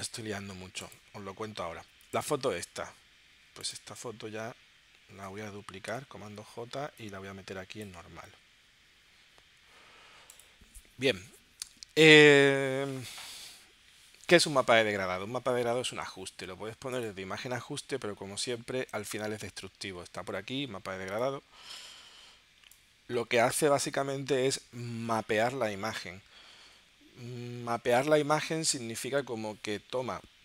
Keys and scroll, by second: 5.9 super+j.